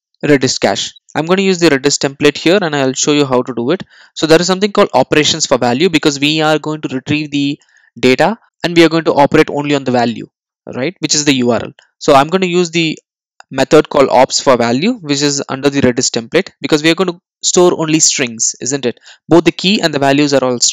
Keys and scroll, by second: 2.6 Return.